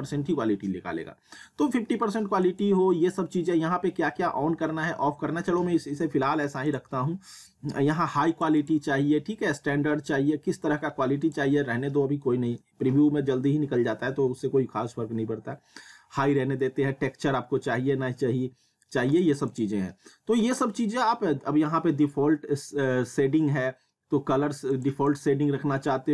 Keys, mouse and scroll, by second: 2.5 click, 6.7 click, 11.2 click, 19.1 click, 24.7 click.